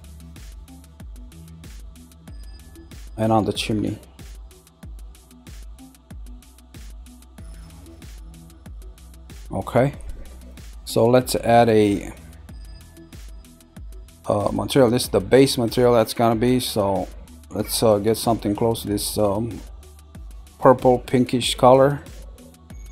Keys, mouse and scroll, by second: 1.1-4.2 middle drag, 6.1 middle click, 7.2-9.3 middle drag, 9.6-13.4 middle drag, 21.9 click.